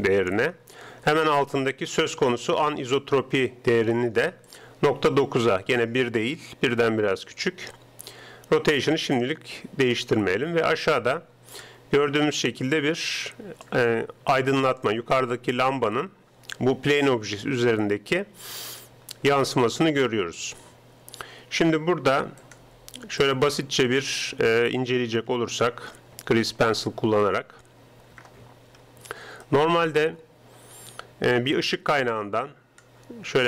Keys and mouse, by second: 4.5-6.1 drag, 10.9-12.2 drag, 12.2-14.1 middle drag, 14.3-17.0 middle drag, 19.2-20.8 middle drag, 22.5-24.2 drag, 25.3 KP_7, 28.2 ctrl+Up, 31.2-33.4 typing, 31.9-33.4 drag.